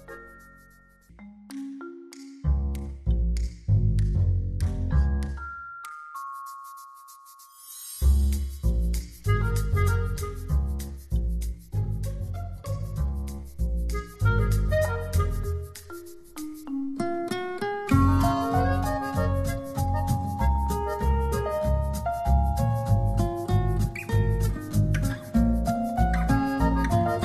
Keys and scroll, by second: 1.2 space, 2.1 z, 12.8 b, 13.8 [, 15.8 x, 18.0 space, 25.2 z.